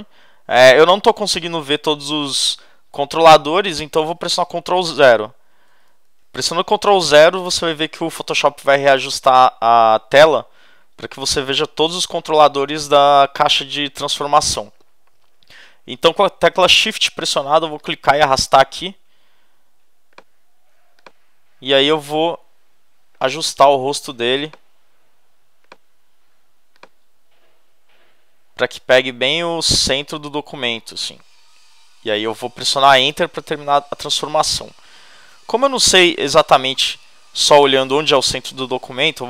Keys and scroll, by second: 5.7 super+0, 33.1 Return, 36.1 super+=.